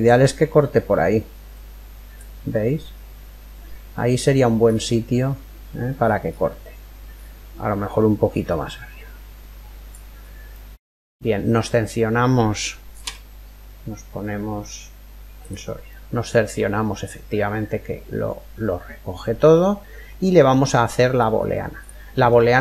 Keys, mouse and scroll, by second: 4.2-5.5 scroll up 1, 5.5 middle click, 6.3-6.8 scroll down 1, 6.8 middle click, 7.7 scroll down 1, 7.9-8.6 scroll up 1, 8.0 click, 8.6 scroll up 1, 9.8 scroll down 1, 10.1-12.0 middle drag, 12.6 z, 15.5-17.5 middle drag, 20.8-21.4 scroll up 1, 21.4 middle click, 21.4-22.6 right drag.